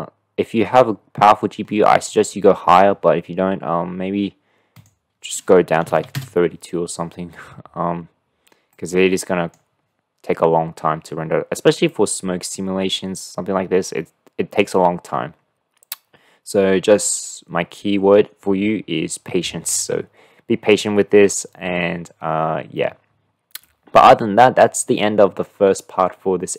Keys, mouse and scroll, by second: 1.8-4.9 middle drag, 4.9-7.1 drag, 8.7-9.8 drag, 11.9-12.6 drag, 12.6 middle click, 23.7-24.8 middle drag, 25.5-26.5 middle drag.